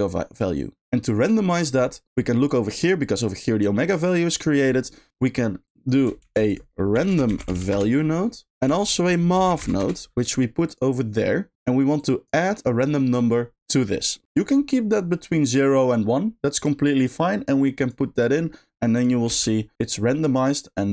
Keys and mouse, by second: 0.9 middle click, 2.4-3.4 drag, 4.4 middle click, 5.6 click, 11.5 click, 11.9 click, 13.9 middle click, 15.7-17.8 drag, 18.9 click, 19.2 space.